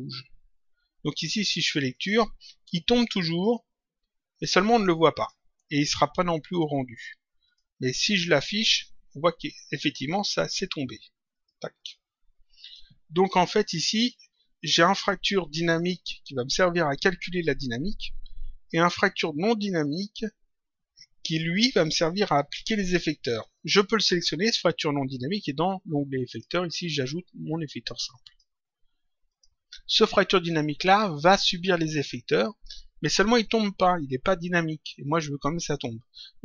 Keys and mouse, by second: 1.9 click, 5.0 click, 6.5 click, 11.3 click, 23.3 click, 26.2 click, 27.4 click, 29.2 click.